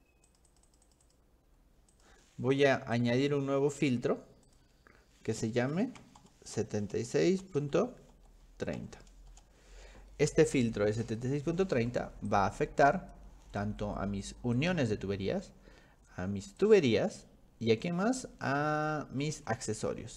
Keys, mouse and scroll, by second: 0.3 click, 0.5 click, 0.7 click, 0.9 click, 1.0 click, 2.0 click, 3.0 click, 4.5 click, 5.6-7.1 typing, 8.1 ., 8.7 3, 9.4 Return, 11.1 click, 12.3 click, 14.6 click, 16.6 click, 19.0-20.1 scroll up 13.